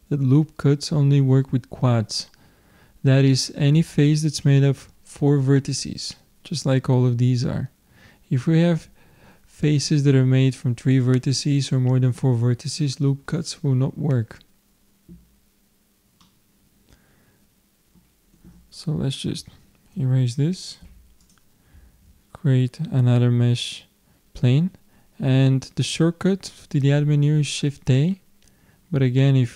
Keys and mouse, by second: 16.2-17.9 middle drag, 19.4 Tab, 20.9 x, 21.9 shift+a.